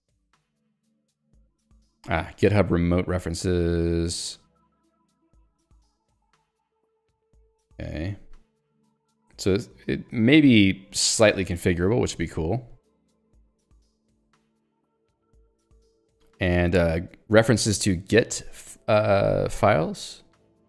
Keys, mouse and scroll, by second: 0.9 k, 4.4 j, 7.3 ctrl+d.